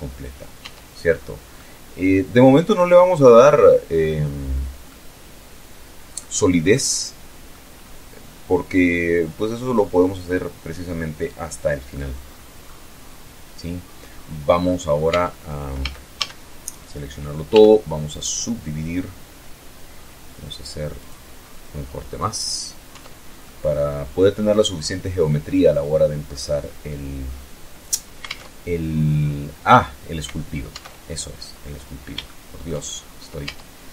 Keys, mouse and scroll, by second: 0.1-2.4 drag, 2.5-2.8 scroll down 1, 3.4-4.9 drag, 5.0 scroll down 1, 5.2-6.2 drag, 6.3 scroll up 1, 6.8 scroll down 1, 7.2-10.5 middle drag, 10.5-11.1 scroll down 2, 10.7 middle click, 11.1-13.2 middle drag, 13.6 Tab, 14.3 a, 16.0 w, 16.7 click, 19.5 click, 21.4 Tab, 21.9-24.6 middle drag, 24.8-25.4 scroll up 2, 25.8 scroll down 2, 26.8 alt+Tab, 29.2 alt+Tab, 30.2-30.5 scroll up 2, 30.7-31.4 shift+middle drag, 31.4 shift+scroll up 2, 31.9 Tab, 32.7 a, 33.4-33.9 middle drag.